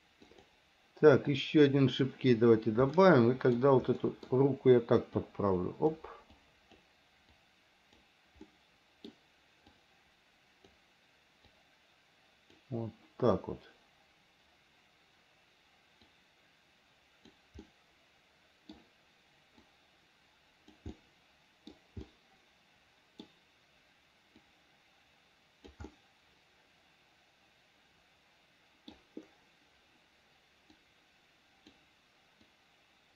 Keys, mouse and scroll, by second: 0.5 click, 1.5 click, 3.1 middle click, 4.2 middle click, 5.4 click, 6.6 click, 7.6 click, 8.7 middle click, 10.0 click, 11.7-12.8 drag, 16.3-17.6 drag, 17.8-18.9 middle drag, 19.9-21.0 drag, 21.2 middle click, 22.3-23.5 middle drag, 24.6-25.9 drag, 26.1-29.2 middle drag, 31.0-32.0 drag, 32.7-33.1 drag.